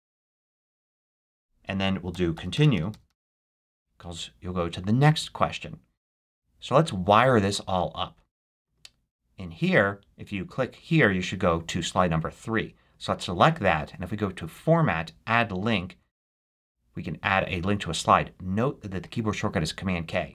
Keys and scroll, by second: 1.8-3.5 typing.